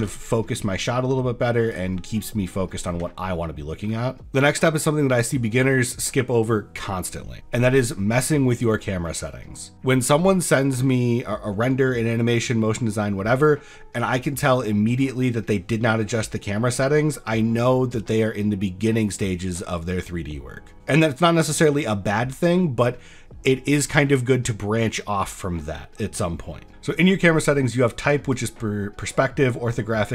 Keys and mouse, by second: 0.1 shift+f, 3.1 ctrl+drag, 3.3 ctrl+middle click, 28.3-30.1 drag.